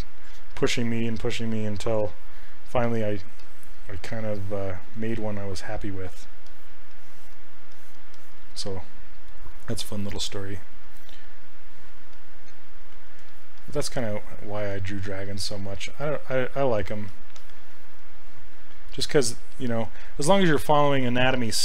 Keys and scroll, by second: 10.8 s.